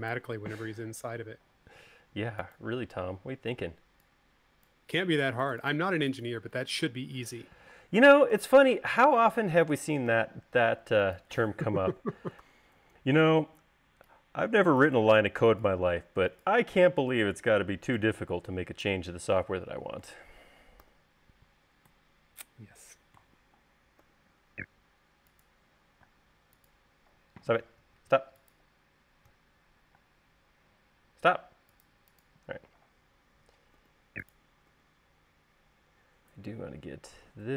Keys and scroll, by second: 1.0 u, 4.0 space, 8.8 u, 10.5 u, 12.8 v, 21.3 u, 24.5 u, 26.5 space, 28.1 Home, 28.2 Home, 28.4 Home, 28.5 Home, 29.7 Home, 30.4 space, 34.1 u.